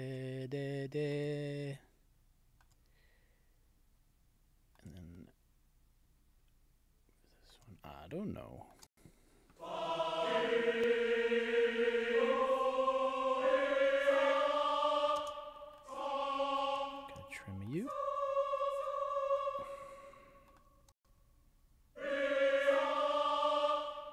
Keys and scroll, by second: 8.8 space, 15.2 space, 20.9 space.